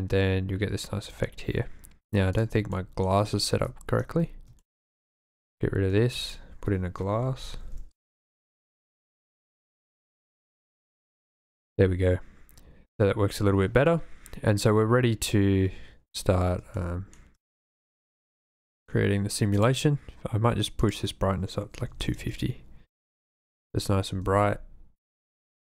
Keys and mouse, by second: 2.7 shift+click, 4.7 shift+click, 5.5 x, 6.0 shift+a, 10.7 click, 16.9 shift+middle click, 18.0-19.0 drag, 20.8-22.2 drag, 24.2 r, 24.3 x, 25.5 click.